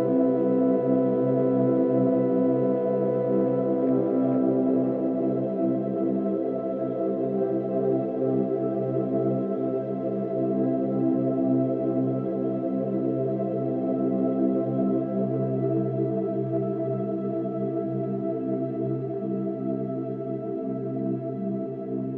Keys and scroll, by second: 7.5 ctrl+z.